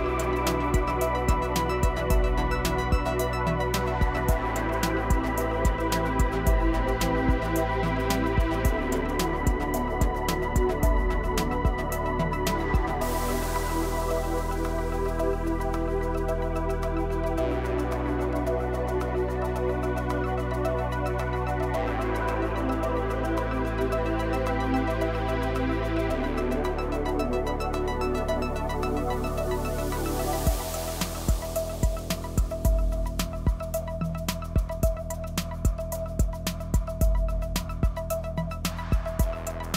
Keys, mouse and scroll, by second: 3.2-4.7 middle drag, 8.7 click, 9.4-10.9 middle drag, 13.0 click, 13.3-19.5 middle drag, 20.5-22.5 middle drag, 31.0-34.1 middle drag, 34.6 scroll up 3, 35.0 shift+middle click, 37.3 e.